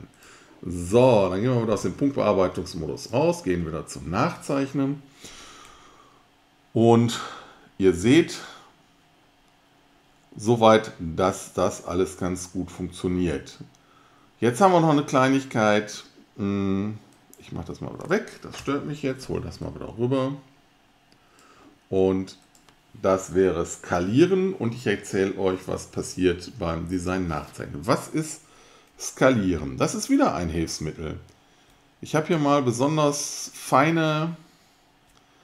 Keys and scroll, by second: 18.6 alt+BackSpace.